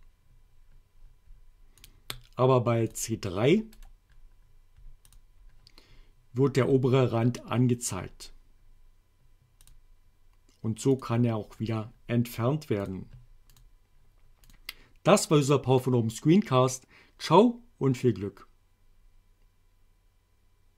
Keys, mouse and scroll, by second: 1.8 click, 2.9 click, 3.7 right click, 5.1 click, 9.7 click, 11.0 click, 12.9 click, 13.6 click, 14.5 click.